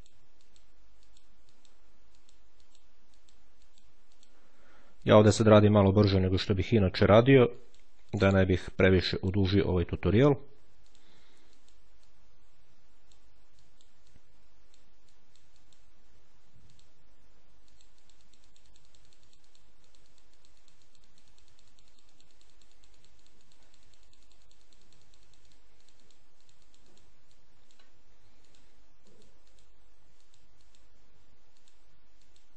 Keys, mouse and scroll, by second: 1.4-3.1 drag, 3.5-4.6 drag, 4.8-6.2 drag, 7.4-8.9 drag, 10.7 ctrl+click, 11.4 ctrl+click, 14.0 click, 15.0 click, 15.4 click, 16.6 ctrl+click, 17.6-27.2 drag, 28.3-29.9 ctrl+drag, 31.4-32.5 drag.